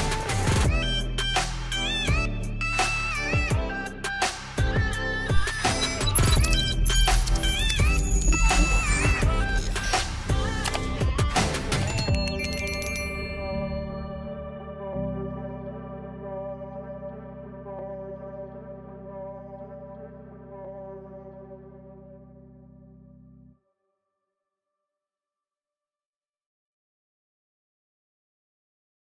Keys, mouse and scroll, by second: 0.1 click, 3.4 click, 4.4 click, 10.8 click, 15.5 click, 19.7 click, 22.3 ctrl+j.